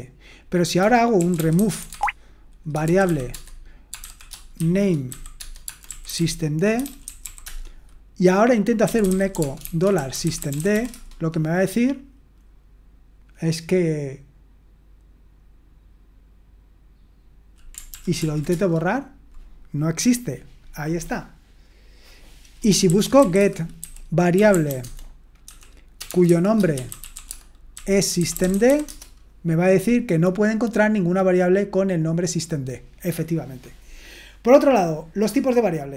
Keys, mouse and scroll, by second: 0.9-11.2 typing, 17.9 ctrl+p, 18.2 ctrl+p, 18.5 Return, 22.7-29.1 typing, 31.6-32.6 scroll down 1, 32.6-33.2 scroll down 1, 33.2-34.6 scroll down 1, 34.6-35.9 scroll down 1.